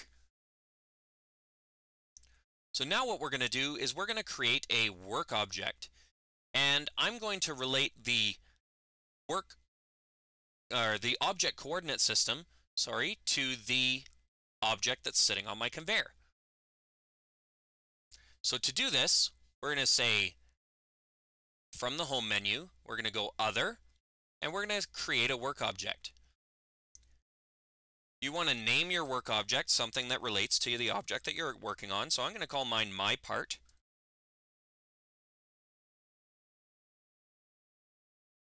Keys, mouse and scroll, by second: 23.2 click, 24.9 click, 28.0 click, 28.2 click, 28.4 click, 28.7 click, 33.0 click, 33.1 click.